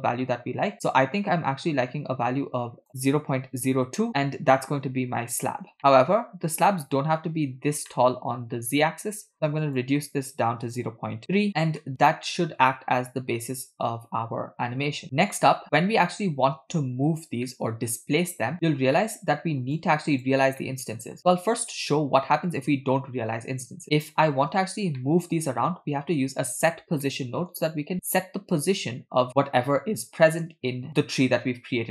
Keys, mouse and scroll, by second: 4.1-4.8 middle drag, 5.0-5.4 scroll up 3, 5.8-6.2 shift+middle drag, 6.3 scroll up 1, 6.4-6.7 scroll down 1, 6.8-7.2 middle drag, 8.0-8.5 middle drag, 9.6-11.5 drag, 11.8-15.1 middle drag, 15.6-16.0 scroll down 4, 17.5-17.9 middle drag, 18.7 scroll down 2, 19.0 middle click, 19.8 click, 20.6 middle click, 21.3 click, 24.9 shift+a, 25.0-25.4 middle drag, 27.0-27.5 middle drag, 30.9 middle click, 30.9-31.9 scroll down 1.